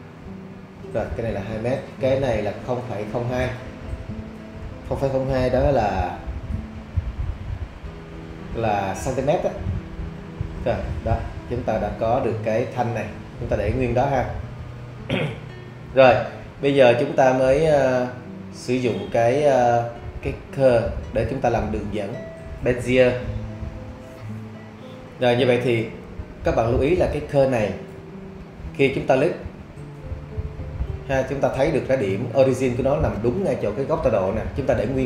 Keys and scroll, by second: 5.0 0, 5.8 ., 7.2 0, 8.1 2, 10.1 Return.